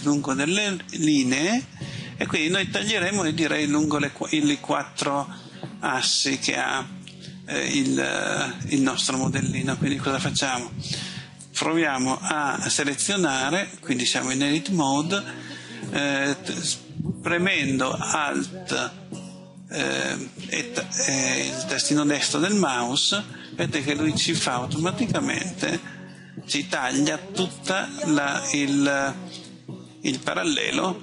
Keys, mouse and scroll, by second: 1.7 middle click, 22.5 alt+right click, 23.7 middle click.